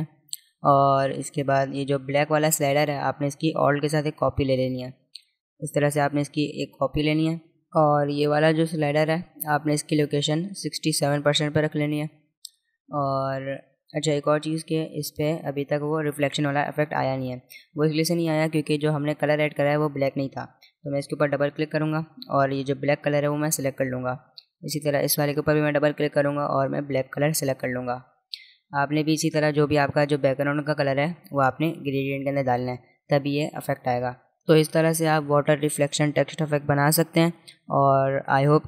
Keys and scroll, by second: 36.0 space, 36.5 alt+space.